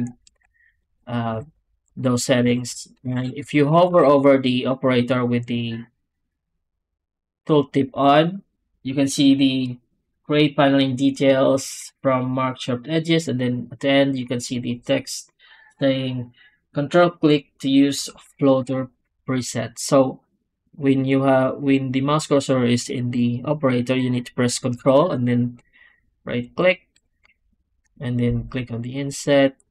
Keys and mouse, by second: 0.7 click, 1.2 x, 1.8 click, 2.9 shift+q, 3.7 w.